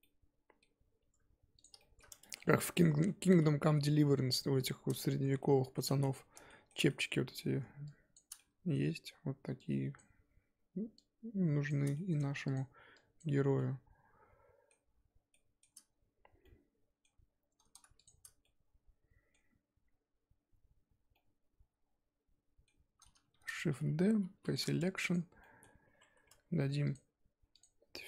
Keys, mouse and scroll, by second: 0.0-1.6 middle drag, 1.6 click, 1.8 shift+middle click, 2.1 scroll up 1, 2.2 Tab, 2.4 middle click, 2.7-3.0 scroll up 2, 3.0-4.9 middle drag, 4.9 click, 5.4-8.1 shift+middle drag, 8.1 shift+click, 8.4-9.9 middle drag, 9.9 shift+click, 11.7 shift+click, 11.9 middle click, 12.5 shift+click, 13.2 shift+click, 13.6-18.0 middle drag, 18.0 shift+click, 18.4-23.3 middle drag, 23.3 shift+d, 24.5 p, 24.8 Tab, 25.1 click, 25.4 middle click, 25.8 Tab, 26.0 a, 26.3 Tab.